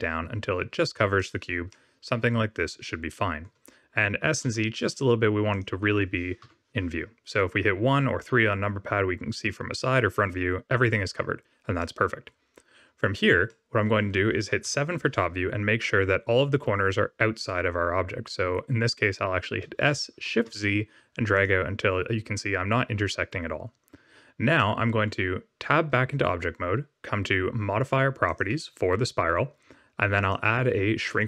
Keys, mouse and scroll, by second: 1.7 middle click, 4.1 s, 6.4 KP_1, 11.7 middle click, 13.4 middle click, 14.6 KP_7, 19.6 s, 24.5 middle click, 25.7 Tab, 28.2 click, 30.1 click.